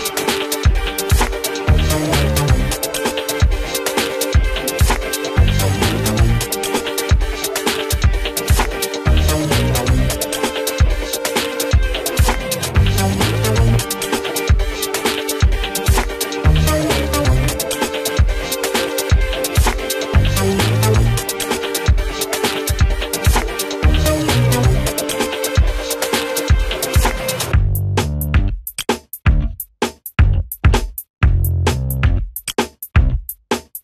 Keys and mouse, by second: 0.6 click, 1.6 ctrl+z, 3.5-6.8 drag, 6.8 Delete, 7.7 click, 8.4 ctrl+z, 8.8-18.8 drag, 19.4 q, 20.0 click, 20.5 Down, 27.5 ctrl+z, 28.1 click, 29.5 ctrl+z, 30.2 right click, 31.0 click, 31.5 r, 31.8-33.8 drag.